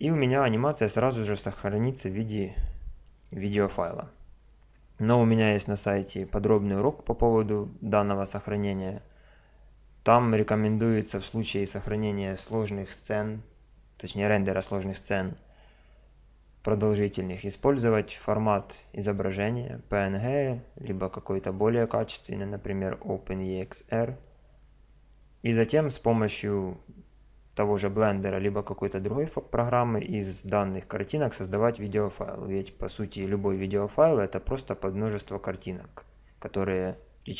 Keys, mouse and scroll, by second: 17.8-19.7 drag.